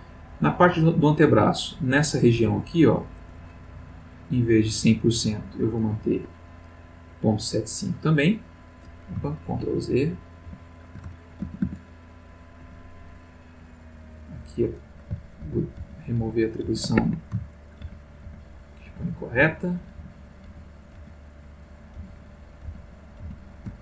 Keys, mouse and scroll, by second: 0.4 click, 2.3 c, 3.9-4.6 scroll up 4, 4.8 click, 6.1 Escape, 7.7 click, 9.5 ctrl+z, 10.4 ctrl+z, 11.4 ctrl+a, 12.6 c, 13.2-14.4 drag, 15.4 ctrl+z, 17.0 ctrl+Escape, 17.8 ctrl+z, 22.0 ctrl+z, 22.7 ctrl+z.